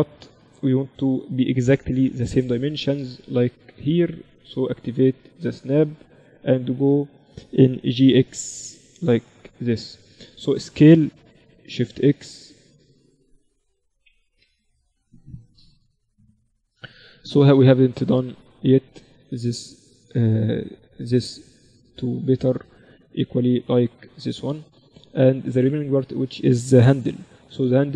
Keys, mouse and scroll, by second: 0.5 KP_7, 2.2 click, 3.8-7.3 drag, 7.0 right click, 7.3 middle click, 8.1 g, 9.8-12.4 middle drag, 11.6 s, 17.2 Tab, 20.6-26.5 middle drag.